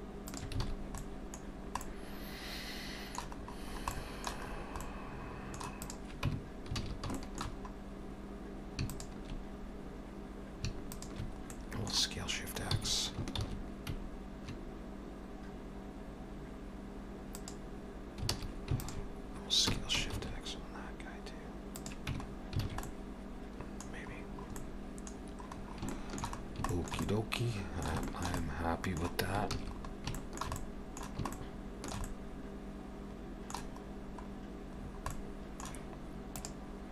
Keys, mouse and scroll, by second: 0.7 alt+a, 0.7-2.7 scroll down 5, 1.0 middle click, 1.8 middle click, 3.4-4.0 scroll up 6, 4.0 middle click, 4.5-5.1 scroll up 2, 4.8 middle click, 5.8 click, 6.3 Tab, 6.8 alt+a, 7.2 shift+middle click, 7.5-7.9 scroll up 3, 8.9 alt+shift+click, 9.6-10.2 scroll up 2, 10.9 alt+shift+click, 11.5 middle click, 12.8 s, 18.3 alt+a, 18.8 alt+shift+click, 19.7 s, 22.1 Tab, 22.3 scroll down 4, 22.7 alt+a, 22.9 middle click, 23.9-24.8 scroll down 3, 24.6 middle click, 25.2-25.9 scroll down 4, 25.9 shift+middle click, 26.4 scroll down 2, 26.7 shift+middle click, 27.0 middle click, 28.1 shift+middle click, 28.4 middle click, 29.6 ctrl+s, 29.8-30.2 scroll up 3, 30.2 middle click, 30.6 middle click, 31.3 shift+middle click, 32.0 middle click, 33.9-34.4 scroll up 2, 34.8 scroll down 4, 35.1 middle click.